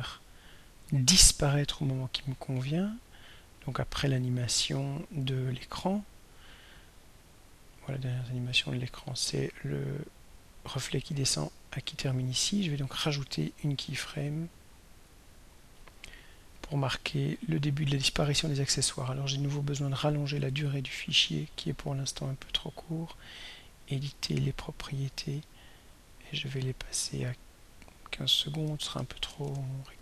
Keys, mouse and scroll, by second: 5.3 click, 7.6-12.4 drag, 14.0 click, 15.2 click, 16.6 click, 21.3 click, 24.5 click, 26.2 click, 27.7 click, 28.9 BackSpace, 29.5 BackSpace, 29.9 5.